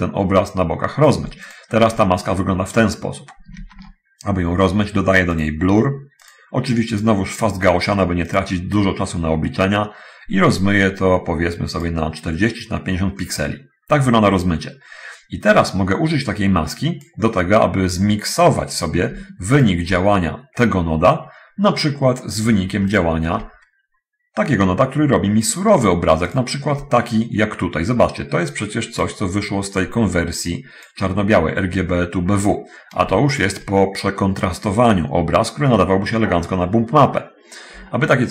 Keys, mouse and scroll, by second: 1.6 ctrl+shift+click, 5.6 click, 6.5 click, 8.5 click, 10.8-12.2 drag, 15.8-17.4 drag, 19.8 ctrl+shift+click, 23.1 ctrl+shift+click, 26.5 ctrl+shift+click, 29.3-31.2 drag, 33.6 ctrl+shift+click.